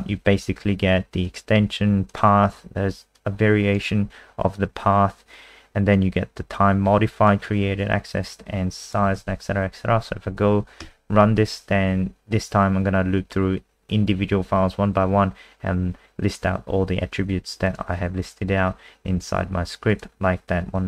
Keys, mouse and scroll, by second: 9.1 ctrl+s, 10.8 F5, 17.6 click.